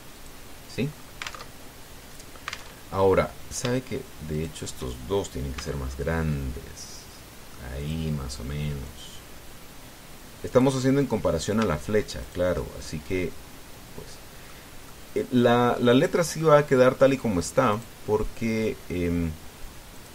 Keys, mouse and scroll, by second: 0.9 click, 1.5-1.8 scroll down 2, 2.2 alt+Tab, 3.5 alt+Tab, 5.1 shift+right click, 6.3 s, 8.6 click, 9.6-11.5 drag, 13.0 shift+right click, 13.6-15.4 shift+middle drag, 15.7-18.2 middle drag, 18.5-20.1 right drag.